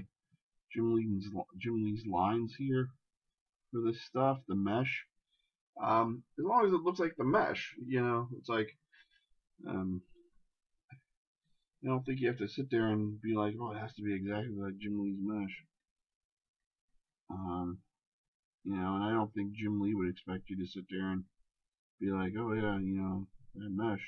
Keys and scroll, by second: 9.0 shift+space, 12.2 shift+space.